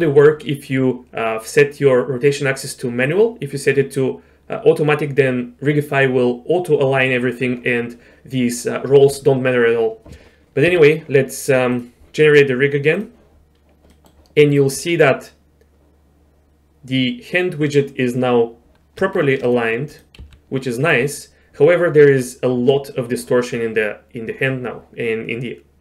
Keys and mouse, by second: 3.1-5.2 drag, 10.7 q, 13.9 middle click, 19.0 Tab, 19.5 click, 19.9 click, 20.2 g.